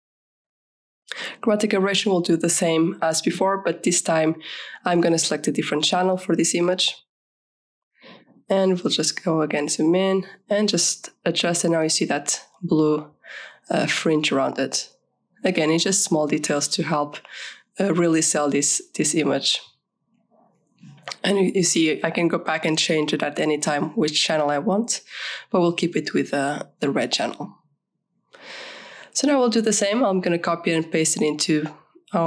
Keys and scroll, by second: 0.2-3.2 typing, 10.0 ctrl+=, 10.8 v, 11.2 Left, 11.9 Up, 27.4 ctrl+-, 29.5 ctrl+-, 30.1 ctrl+a, 31.6 ctrl+shift+c.